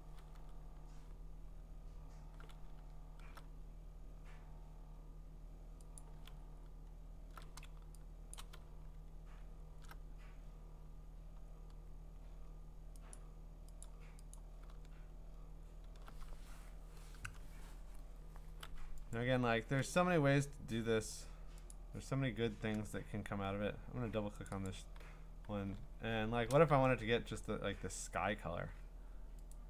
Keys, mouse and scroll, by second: 0.6 scroll down 2, 0.9-1.7 scroll up 13, 2.5-3.1 scroll down 6, 3.5-4.2 scroll, 4.7 scroll, 6.0 click, 6.4-7.1 scroll, 8.3 click, 8.7-9.7 scroll, 10.3-11.3 scroll, 12.6-13.3 scroll, 13.1 click, 13.8 click, 14.3 click, 14.9-15.6 scroll, 15.8 scroll down 3, 15.8-18.2 scroll down 5, 19.2 click, 19.9 click, 20.2 scroll up 4, 20.4 scroll down 4, 20.7 scroll up 2, 20.9-21.7 scroll down 2, 21.7 click, 24.5 click, 24.7 click, 25.8-28.8 scroll, 28.8 scroll, 29.5 click.